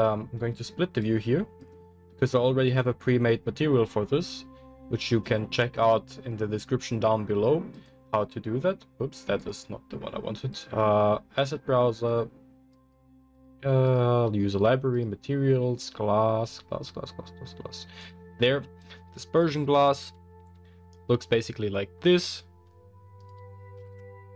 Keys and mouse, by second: 1.0-15.0 drag, 15.0-18.0 middle drag, 18.0 click, 18.1-18.8 middle drag, 18.8-19.8 drag, 19.8-23.2 middle drag, 23.2-24.3 drag.